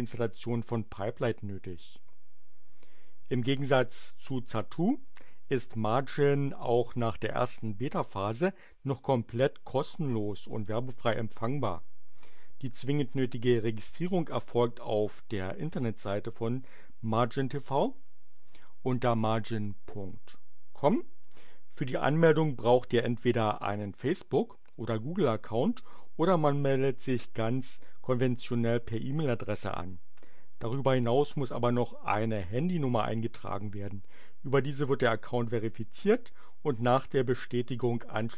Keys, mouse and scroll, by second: 20.6 click.